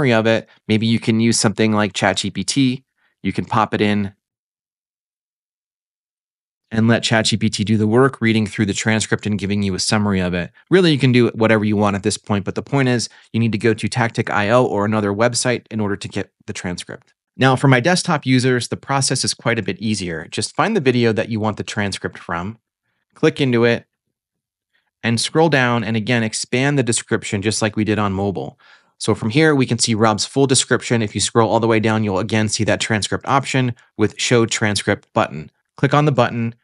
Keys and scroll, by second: 4.9-6.2 typing.